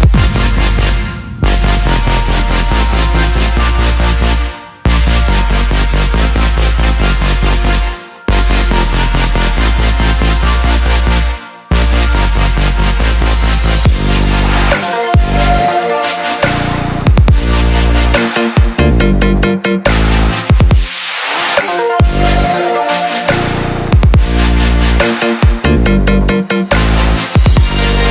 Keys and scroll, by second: 1.2 ctrl+j.